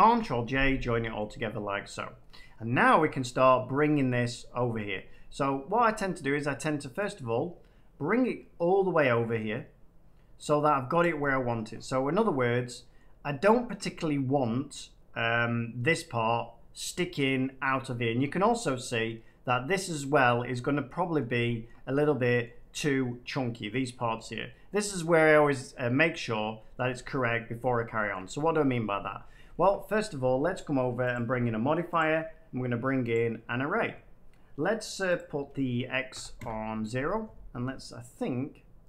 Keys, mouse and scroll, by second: 0.0 ctrl+j, 1.1 middle click, 1.3 scroll, 1.4-1.9 scroll up 5, 2.3 middle click, 3.0 shift+middle click, 3.8 shift+middle click, 10.9 click, 11.4-12.0 shift+middle click, 11.6 middle click, 12.9 middle click, 13.6 shift+middle click, 14.3 middle click, 18.0-18.9 scroll down 2, 19.4 middle click, 20.4-22.4 middle drag, 20.4-21.1 scroll up 1, 24.6 middle click, 26.7 middle click, 27.7 middle click, 28.0 shift+middle click, 28.5 middle click, 29.3-30.5 shift+middle drag, 31.1-32.8 drag, 35.1 click, 36.1 0, 36.3 Return.